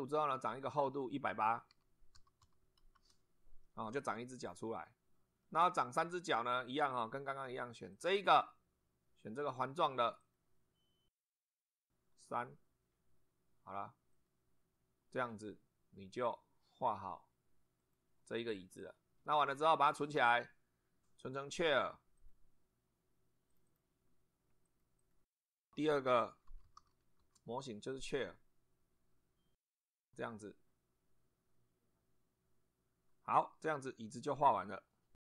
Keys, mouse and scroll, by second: 0.6 click, 1.5-2.9 typing, 2.9 Return, 3.6-5.6 middle drag, 6.7-7.3 drag, 7.9 click, 10.2 click, 12.3 click, 14.1 click, 16.2 click, 17.8 click, 20.3 click, 22.2 click, 23.5 click, 24.7 click, 25.7-27.3 typing.